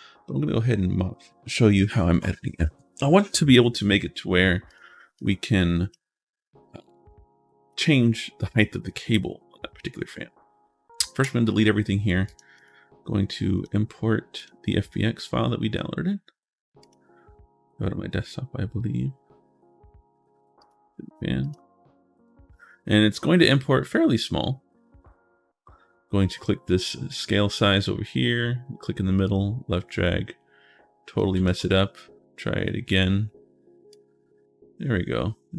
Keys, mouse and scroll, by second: 4.5 click, 5.0 click, 12.0 click, 12.3 click, 13.4 click, 14.2 click, 16.6 click, 20.4 click, 21.2 click, 22.6 right click, 23.5 middle click, 24.7 middle click, 26.9 click, 28.1 middle click, 29.0-31.0 drag, 31.2 ctrl+z, 32.4 middle click, 32.7 right click, 33.0 right click, 33.7-35.5 drag.